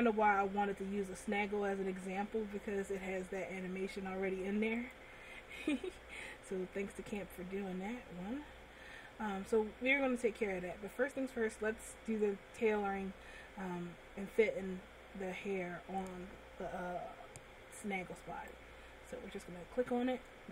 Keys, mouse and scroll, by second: 5.9 click, 7.2 click, 9.2 scroll up 1, 9.7 middle click, 11.3 middle click, 18.7 right click.